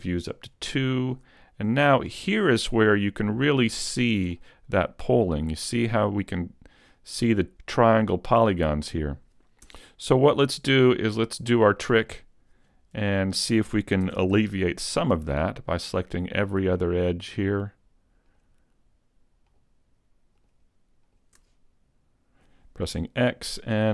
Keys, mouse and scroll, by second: 0.1 click, 0.9 shift+middle click, 1.5-1.9 scroll up 2, 1.9 shift+middle click, 2.4 middle click, 3.5-3.8 scroll up 2, 3.8 shift+middle click, 4.4 middle click, 9.7 Tab, 10.1-10.5 scroll down 1, 10.5 middle click, 11.0-11.3 scroll up 1, 11.3 shift+middle click, 11.8 middle click, 14.1 ctrl+Tab, 15.3 right click, 15.8 shift+right click, 16.5 shift+right click, 18.1 shift+right click, 18.4 shift+right click, 19.5 shift+right click, 20.4 shift+right click, 21.1 shift+right click, 22.9 x.